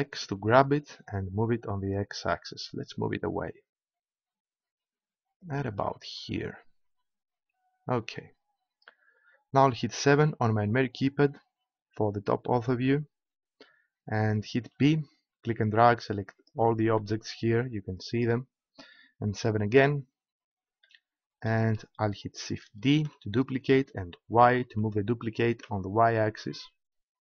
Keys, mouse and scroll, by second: 5.7-7.4 drag, 10.0 KP_7, 14.7 b, 16.7-17.9 drag, 19.2 KP_7, 22.9 shift+d.